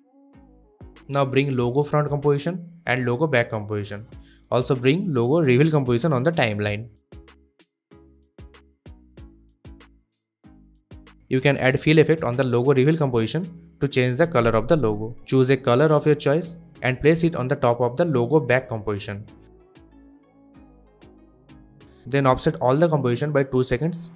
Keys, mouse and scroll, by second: 1.1-1.7 click, 2.5-2.9 click, 3.7 click, 3.8 s, 3.9-4.3 click, 4.3 ctrl+z, 5.0 drag, 11.1 ctrl+space, 11.3-12.5 typing, 12.7 Return, 14.3-20.4 drag, 15.5-16.8 click, 16.3 click, 20.4-22.4 drag.